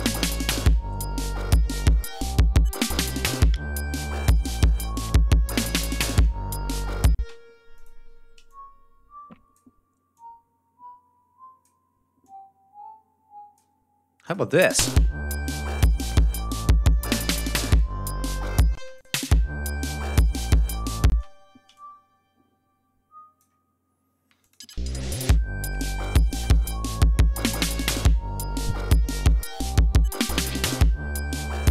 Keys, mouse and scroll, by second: 7.1 space, 7.3 ctrl+scroll up 2, 7.7 ctrl+click, 8.2 ctrl+e, 8.4-9.7 ctrl+drag, 10.1-11.8 drag, 12.2-13.7 drag, 14.2 click, 14.5 space, 15.3 g, 15.6 ctrl+scroll down 2, 15.9 ctrl+scroll up 2, 18.7 space, 18.9 click, 21.0 space, 21.3 e, 21.7-23.5 drag, 24.3 click, 24.5 space, 25.6 click.